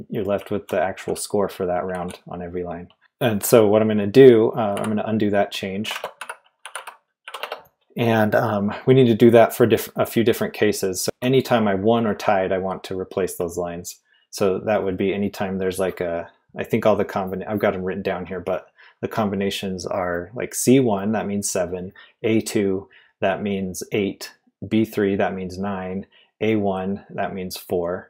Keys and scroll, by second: 0.3-3.0 typing, 4.5-7.9 typing, 10.8-12.0 typing.